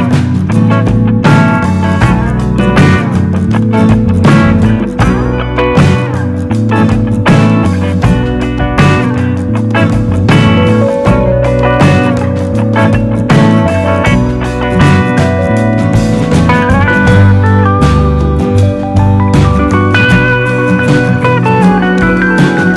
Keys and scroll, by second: 5.0 super+d, 6.3 shift+Right, 6.7 shift+Right, 6.9 shift+Right, 7.1 shift+Right, 7.2 shift+Right, 14.8 Left.